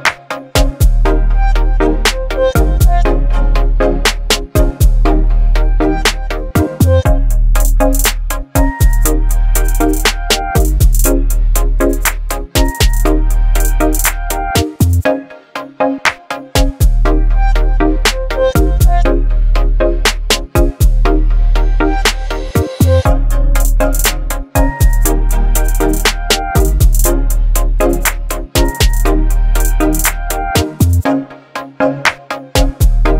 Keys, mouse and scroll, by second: 4.1-7.6 drag, 8.4 Up, 16.4 click, 18.7 ctrl+g, 20.1 click, 20.8-22.1 typing, 22.2 Return, 23.3 click, 25.8 right click, 27.2 click, 31.1-33.1 drag.